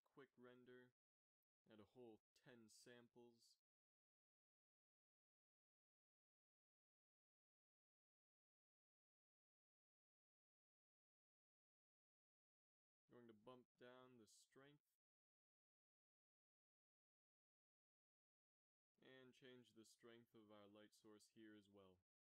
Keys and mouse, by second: 9.8-10.8 drag, 11.0-16.3 drag, 16.9-17.7 middle drag, 17.7-19.0 right drag, 19.0-20.9 middle drag, 20.9-22.2 drag.